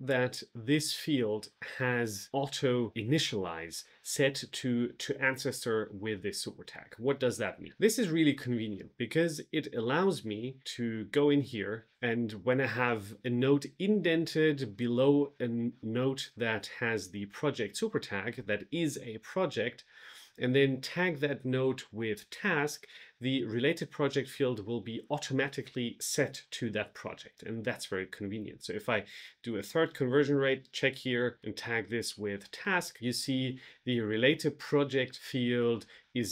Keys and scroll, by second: 31.0-32.0 typing, 32.5 Return.